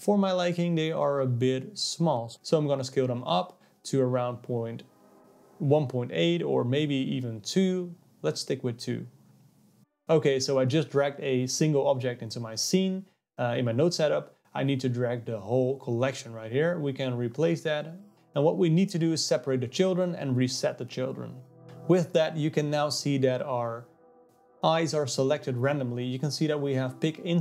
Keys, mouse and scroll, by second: 2.4-6.1 drag, 9.3-11.1 drag, 13.7 click, 15.8 click, 16.0 x, 16.4-19.9 drag, 20.3 click, 26.4 click, 26.8 click.